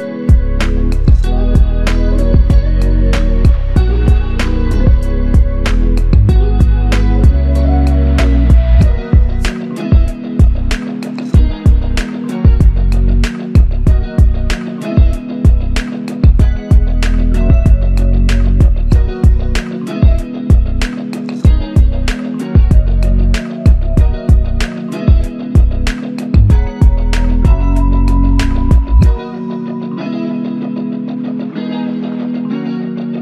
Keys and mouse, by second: 0.7 alt+click, 6.0 double click, 8.7 double click, 9.8 alt+click, 12.2 alt+click, 19.6 alt+click, 19.7 shift+click, 24.3 alt+click, 26.1 shift+click, 27.4 alt+click, 28.3 alt+click, 28.4 shift+click.